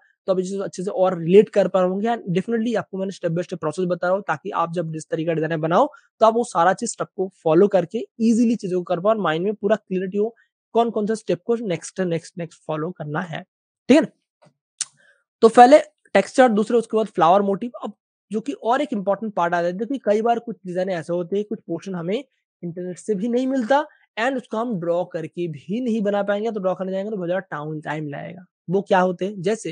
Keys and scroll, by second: 14.6 Page_Up, 15.7 super+space, 17.3 super+space, 17.4 super+space, 18.2 space, 18.3 space, 18.8 v, 19.7 space, 21.4 super+space, 21.9 space, 22.0 space.